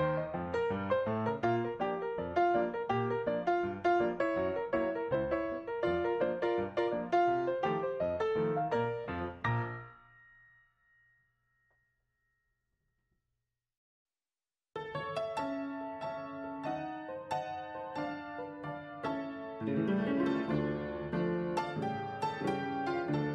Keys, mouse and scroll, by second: 1.0-1.9 scroll down 3, 8.4 Down, 14.2 right click, 19.7 ctrl+s, 21.9 right click.